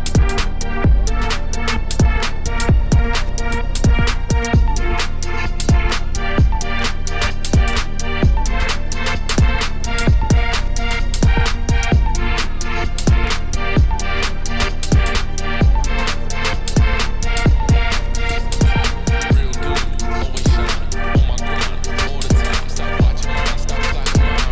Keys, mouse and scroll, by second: 0.3 ctrl+r, 3.2 click, 3.3 g, 6.6 g, 7.8 shift+click, 8.1 ctrl+b, 11.9 middle click, 12.4 KP_Decimal, 12.8 middle click, 13.2 e, 14.6 click, 15.0 click, 15.8 shift+click, 16.2 middle click, 16.3 z, 16.7 click, 17.1 middle click, 17.4 e, 18.9 Tab, 19.4 ctrl+1, 20.0 ctrl+z, 20.2 ctrl+2, 20.4 Tab, 20.6 middle click, 21.1 click, 21.7 i, 22.6 middle click, 23.5 click, 23.9 i.